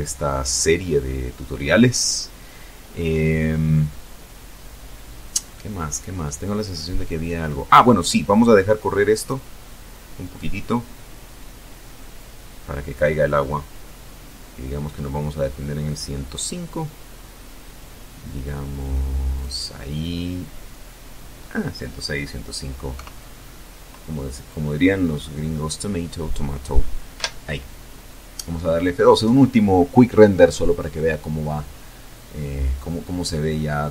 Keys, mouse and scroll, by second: 1.3-1.9 scroll down 4, 2.6-4.9 middle drag, 6.2 click, 16.4 click, 20.0 KP_0, 21.9-22.2 scroll up 2, 24.2 F12.